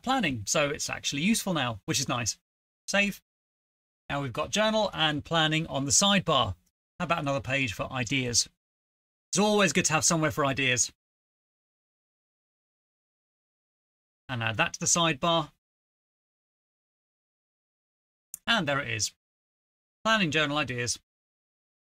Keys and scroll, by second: 0.0-0.8 typing, 6.5-7.9 typing, 7.9 Return, 9.3-11.5 typing, 13.2 typing, 15.1 ctrl+c, 15.7 Return, 15.7 Return, 15.8 ctrl+v, 16.0 Left, 16.1 Left, 16.2-17.1 typing.